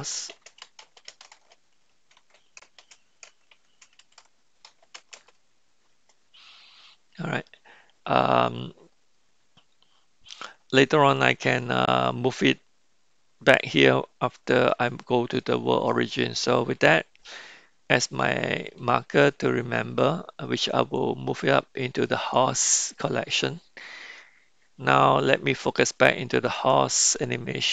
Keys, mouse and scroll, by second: 8.2-10.3 middle drag, 11.2-11.9 middle drag, 12.0 middle click, 14.7 middle click, 16.2-18.7 middle drag, 20.9-22.5 drag.